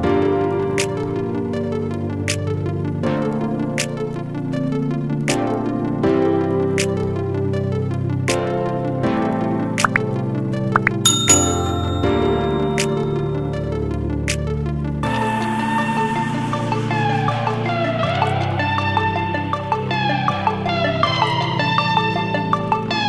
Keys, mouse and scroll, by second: 1.0-5.9 shift+drag, 5.9 shift+click, 15.3-18.2 shift+drag, 20.1 ctrl+space, 20.3 ctrl+click, 20.5 ctrl+space, 21.1 click, 21.2 space, 22.6-23.0 drag.